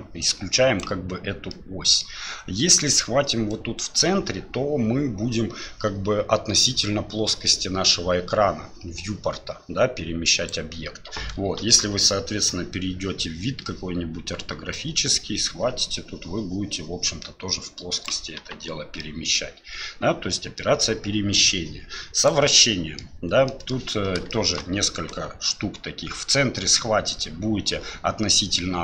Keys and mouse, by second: 1.5-2.0 middle drag, 3.5-10.5 drag, 11.6 KP_7, 14.7-18.1 drag, 18.4 KP_1, 19.0-19.3 middle drag, 20.6 middle click, 22.2 click, 22.6 middle click, 23.5 middle click, 24.3 shift+middle click, 25.1-28.8 drag.